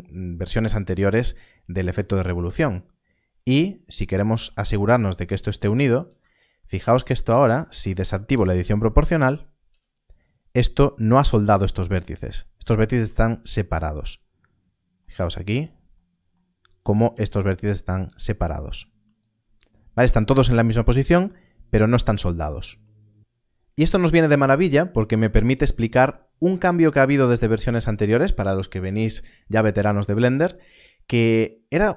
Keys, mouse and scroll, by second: 2.8 a, 3.1-4.0 scroll up 1, 4.7 click, 5.9 g, 6.8 right click, 8.4 0, 9.2 click, 9.6 g, 12.1 g, 12.9 z, 15.5 click, 17.0 click, 19.1 right click, 24.7-27.0 scroll down 1.